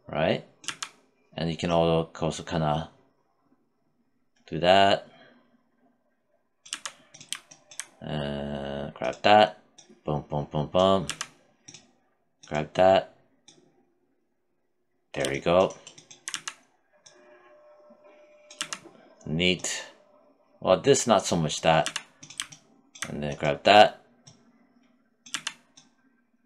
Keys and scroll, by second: 5.9 z, 10.3 z, 15.5 z, 17.8 z, 21.1 z, 24.5 z.